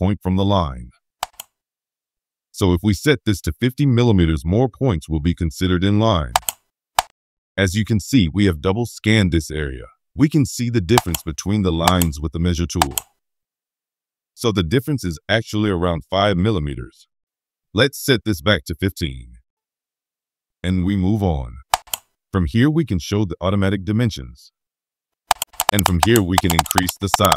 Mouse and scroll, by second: 5.4-5.7 scroll up 2, 6.3 click, 6.9-9.5 middle drag, 10.9 click, 11.8 click, 12.7 click, 21.7 click, 22.5 middle click, 25.2 click, 25.4 click, 25.6 click, 25.8 click, 26.0 click, 26.3 click, 26.5 click, 26.7 click, 26.9 click, 27.1 click, 27.3 click.